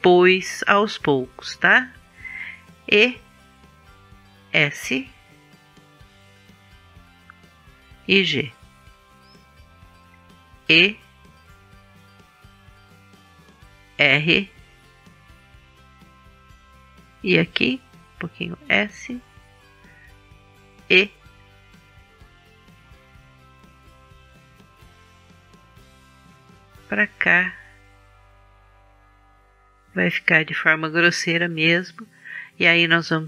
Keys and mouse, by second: 2.8 e, 4.2 click, 4.9 s, 7.0 g, 10.6 e, 14.1 r, 16.1-18.2 drag, 18.3 s, 21.6 e, 26.7-28.4 drag, 29.7-31.6 drag, 31.6-33.2 middle drag.